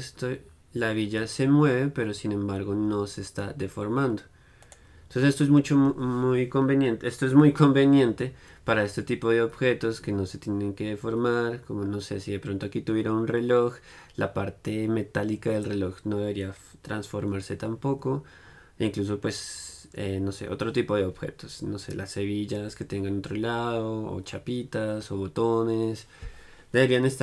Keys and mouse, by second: 7.8-27.2 middle drag.